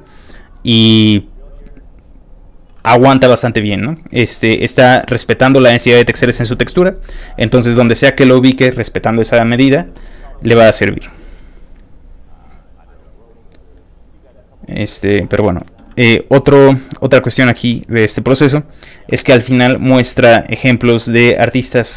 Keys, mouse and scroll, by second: 0.1 click, 0.4 click, 1.0 click, 1.7 click, 2.1 click, 11.2 click, 11.8 click, 13.7 click, 16.1 click, 17.5 click, 18.6 click, 20.8 click.